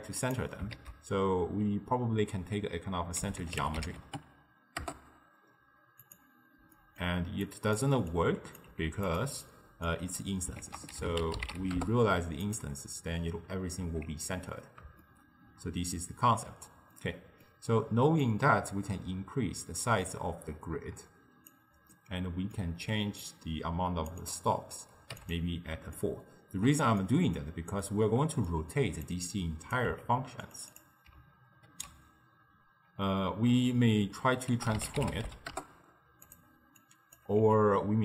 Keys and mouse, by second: 0.8 ctrl+a, 6.8-7.5 middle drag, 7.5 click, 8.2 drag, 8.7 g, 9.4 click, 10.0 click, 10.7 ctrl+a, 13.9 z, 15.1-18.3 shift+middle drag, 18.3-21.5 drag, 22.0-23.3 middle drag, 23.3-25.3 drag, 26.0-29.1 ctrl+middle drag, 29.1 click, 30.0 g, 30.8 click, 31.8 ctrl+a, 36.8 click, 37.4 g.